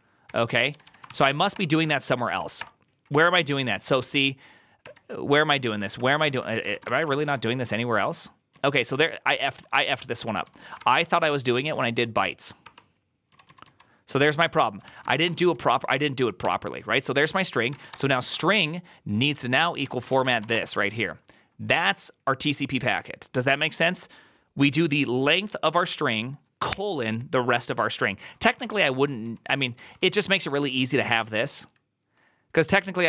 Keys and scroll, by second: 0.0-2.7 typing, 3.8 ctrl+c, 4.7-7.3 typing, 7.8 ctrl+u, 8.4 ctrl+u, 9.4 ctrl+u, 9.7 ctrl+d, 10.1-11.5 typing, 10.6 ctrl+d, 10.9 ctrl+d, 11.5 ctrl+u, 12.5 ctrl+d, 13.2 ctrl+u, 14.7-16.3 typing, 17.4-18.2 typing, 19.7 Tab, 19.7-21.1 typing, 28.4-31.1 typing.